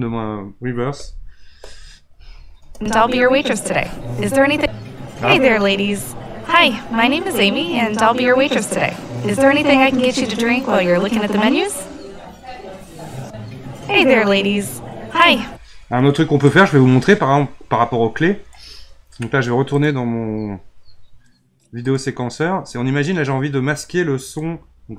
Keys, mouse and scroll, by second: 2.6 space, 15.3-19.5 drag, 19.7-22.7 drag, 24.4 click.